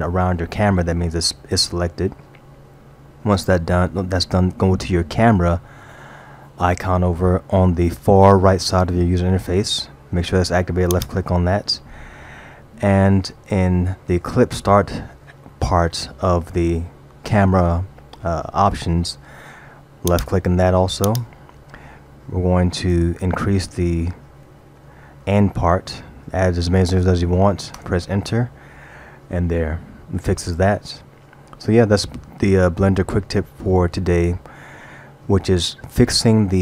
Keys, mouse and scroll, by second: 10.9 click, 20.1 click, 22.9 BackSpace, 24.6 0, 24.8 0, 25.5 0.